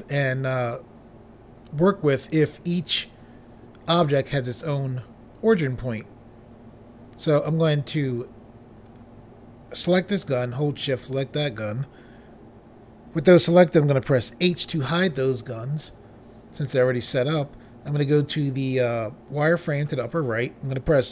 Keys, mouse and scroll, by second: 8.8 click, 10.9 shift+click, 14.4 h, 17.1-18.4 scroll down 1, 19.7 click.